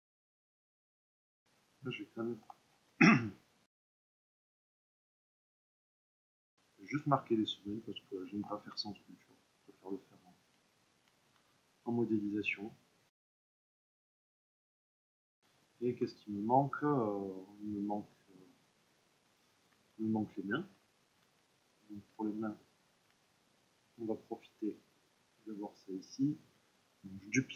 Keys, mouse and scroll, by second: 0.1 click, 0.3 s, 0.6 Return, 0.7 click, 1.1-3.9 ctrl+middle drag, 3.9 click, 5.2-6.3 middle drag, 7.0-8.4 middle drag, 8.4 ctrl+r, 9.8-14.2 drag, 14.2 Tab, 14.5-20.7 ctrl+middle drag, 20.7 Tab, 21.7 click, 22.1 Tab, 22.8-25.0 drag, 25.0 middle click, 25.9 click, 26.4-27.5 middle drag.